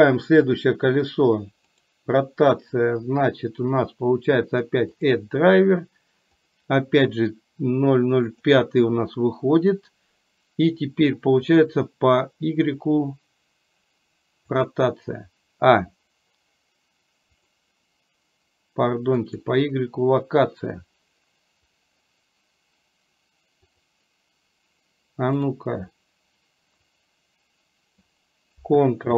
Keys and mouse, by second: 25.5 click, 27.1-28.2 drag.